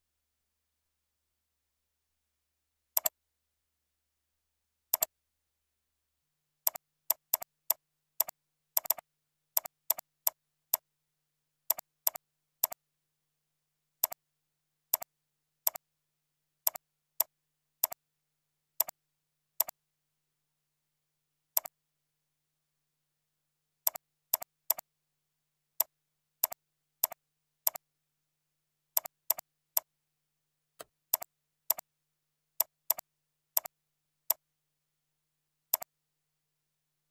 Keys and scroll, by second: 8.7 ctrl+c, 9.0 ctrl+a, 9.2 ctrl+v, 10.3 ctrl+a, 30.5 ctrl+5.